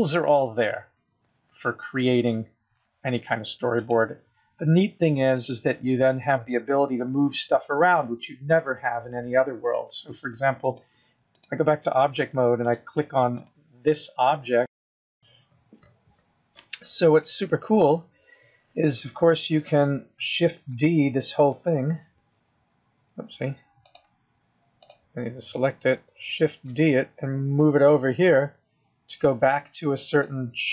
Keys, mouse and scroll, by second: 13.1 click, 15.1 click, 23.8 click, 24.8 click, 26.5 shift+d.